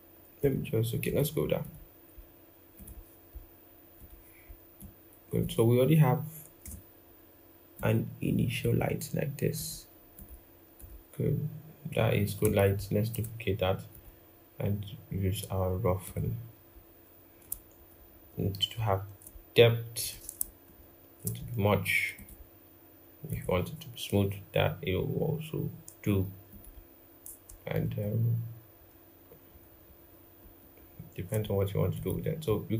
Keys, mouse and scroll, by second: 6.4 typing, 12.4 alt+click, 17.5 shift+Up, 17.7 shift+Up, 18.5 shift+Down, 20.3 shift+Up, 27.6 shift+Down, 28.5 shift+Up, 29.3 shift+Up, 30.1 shift+Down, 30.5 shift+Down.